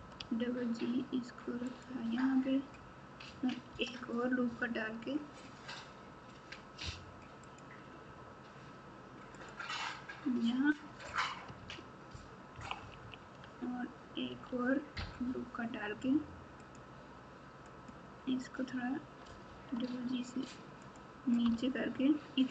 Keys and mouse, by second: 0.0 g, 3.7 ctrl+r, 12.5 KP_2, 12.7 KP_2, 14.2 ctrl+r, 19.3 g, 21.5 Tab.